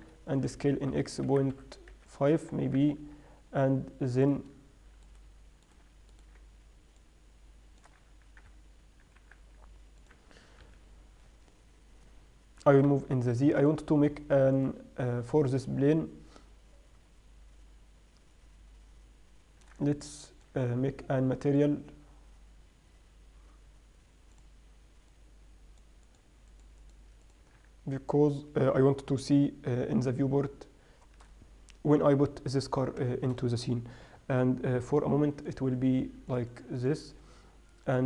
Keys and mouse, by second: 0.6 s, 3.1 z, 4.4 right click, 6.3 right click, 8.3 z, 8.7 Tab, 9.5 s, 10.9 KP_3, 12.9 g, 14.8-16.5 drag, 20.3-21.9 middle drag, 21.9-22.8 drag, 24.6-34.9 drag.